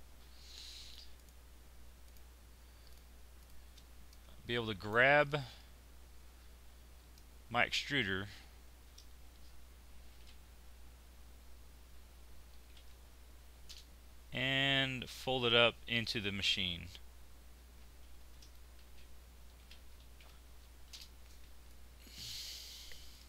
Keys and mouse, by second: 8.7 shift+r, 18.2 shift+r, 21.8 click.